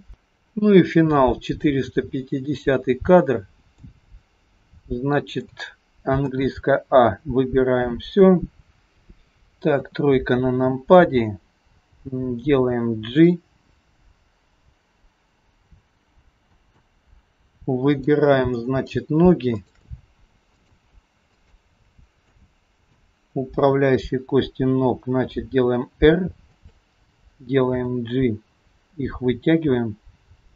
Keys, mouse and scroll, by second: 1.5 click, 3.8 middle click, 6.4 a, 6.9-9.2 scroll down 2, 9.7 KP_3, 12.0 g, 18.0 click, 18.6 middle click, 19.6 shift+click, 21.0 shift+click, 21.6 shift+click, 22.4 middle click, 23.6 KP_3, 25.4 r, 27.7 g.